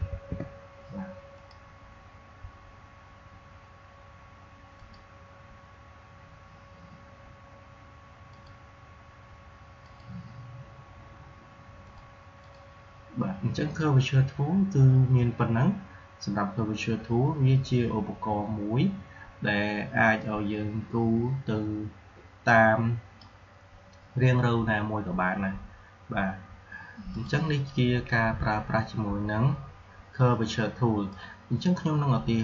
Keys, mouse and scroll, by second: 0.0 shift+*, 1.3 click, 4.7 click, 8.2 click, 22.4-25.7 drag, 27.1 click, 31.3-32.4 drag.